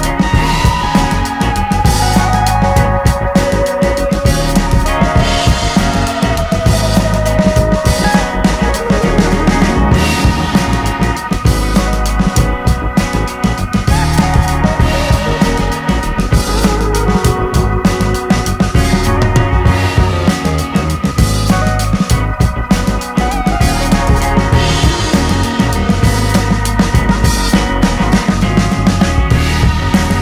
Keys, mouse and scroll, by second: 0.0 click, 0.8 middle click, 1.0 shift+click, 1.2-2.7 middle drag, 2.7 click, 3.4-4.6 middle drag, 4.6-7.1 drag, 7.1-9.0 middle drag, 9.0-10.5 drag, 10.5 middle click, 10.8 shift+click, 11.4-12.8 middle drag, 12.8-13.9 drag, 13.9 middle click, 14.1 shift+click, 15.0 middle click, 15.3-17.2 drag, 17.2 middle click, 17.4-20.2 shift+drag, 20.2 middle click, 21.0 click, 21.5 middle click, 21.8 click, 22.8 middle click, 23.2 shift+click, 23.4 middle click, 24.2 click, 25.1 middle click, 25.5 shift+click, 25.9 middle click, 26.7 scroll down 1, 26.8-28.2 middle drag, 28.2-29.9 drag, 29.9 middle click.